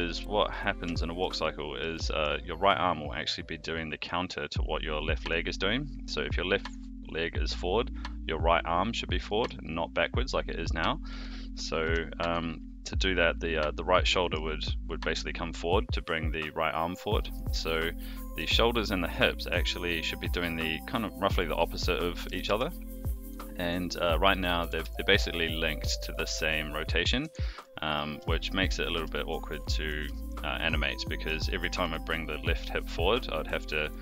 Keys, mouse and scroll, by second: 0.1-0.5 middle drag, 1.0-1.3 shift+middle drag, 1.4-1.8 middle drag, 2.0 shift+middle drag, 9.2 middle drag, 10.7-11.1 middle drag, 11.6 click, 11.8 r, 14.5-15.2 middle drag, 17.1 middle drag, 18.0-18.5 middle drag, 21.3 a, 22.2 alt+g, 22.4 alt+r, 23.2 click, 23.5-23.9 middle drag, 24.3 click, 24.6 r, 27.6-27.9 middle drag, 28.2 shift+middle drag, 28.6-28.9 middle drag, 29.1 shift+middle drag, 29.5-29.9 middle drag, 30.1 shift+middle drag, 30.9-31.2 middle drag, 31.6 r, 33.5 click, 33.9 r.